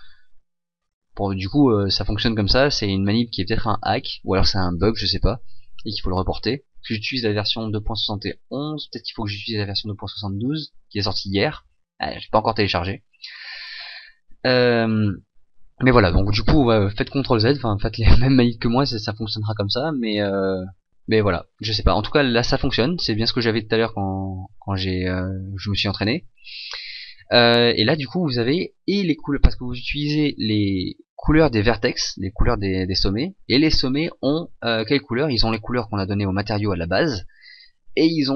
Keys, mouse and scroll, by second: 22.5-25.3 scroll down 1.